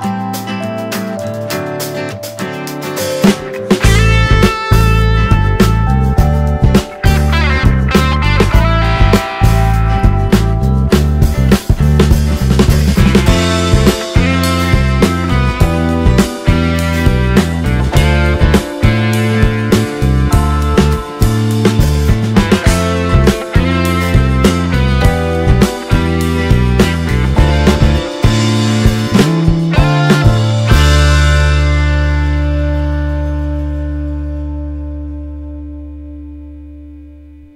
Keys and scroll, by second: 2.2 space, 6.2 space, 15.6 d, 22.2 ctrl+space, 27.0 space, 27.8 t, 29.5 ctrl+space.